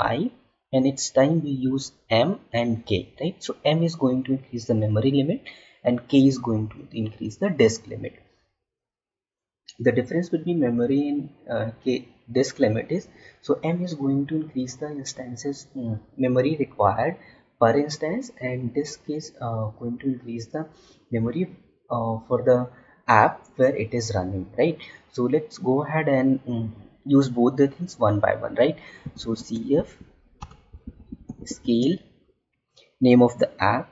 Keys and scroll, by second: 29.3 space, 31.5 space.